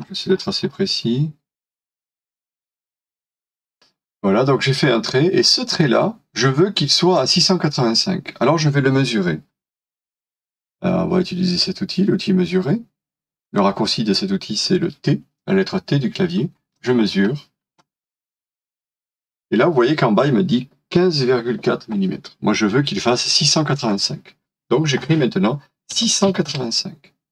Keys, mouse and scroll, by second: 0.0 scroll up 1, 2.9-3.4 scroll down 1, 3.4 middle click, 4.0 scroll down 1, 25.7-27.0 typing.